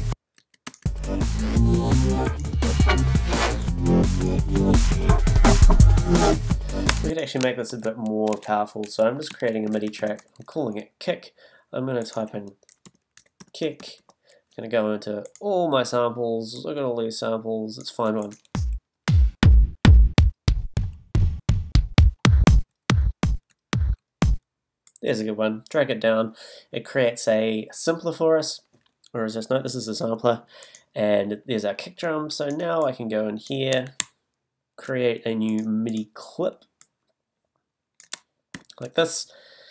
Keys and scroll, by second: 0.4 space, 6.9 space, 7.5 shift+super+space, 7.7 shift+super+t, 8.3 shift+super+r, 9.3 super+r, 9.9 shift+i, 10.6 Return, 12.8 i, 13.4 k, 18.8 Down, 38.5 shift+super+m.